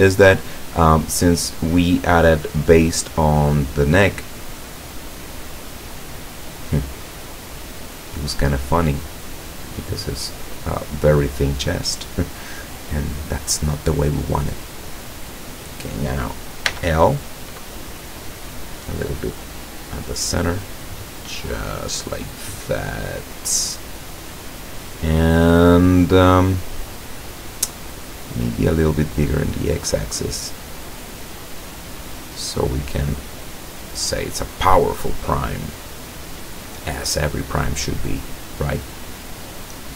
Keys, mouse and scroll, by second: 0.6 middle click, 0.7 scroll down 1, 4.8 right click, 5.3-6.3 middle drag, 6.6-11.4 drag, 14.3-15.7 middle drag, 16.7 l, 17.8-21.0 drag, 21.0-25.3 middle drag, 25.5-27.9 middle drag, 28.5 middle click, 29.3 right click, 29.6-31.1 middle drag, 31.6-35.3 drag, 35.6 scroll down 2, 36.6-38.8 middle drag, 38.9-39.3 scroll up 4, 39.3 scroll down 2.